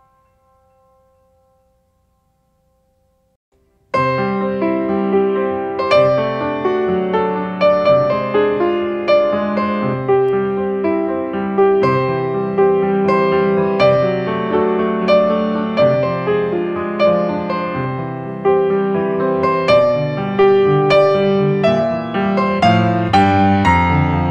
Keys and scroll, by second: 9.2 alt+space, 19.4 alt+space.